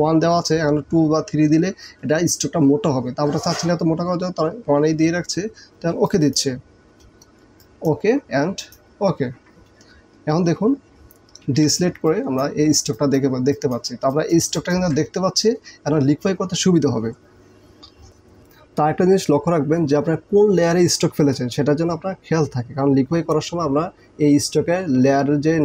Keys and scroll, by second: 11.5 ctrl+d, 12.0 ctrl+space.